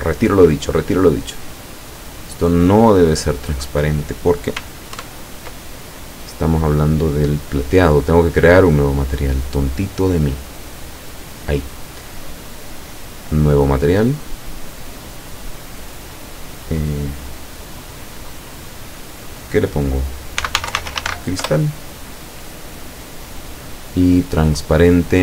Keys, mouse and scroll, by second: 5.0 ctrl+KP_Add, 9.0 click, 10.4 click, 12.5 click, 13.9 click, 15.0 click, 20.4-21.1 typing, 21.5 Return, 23.3 click.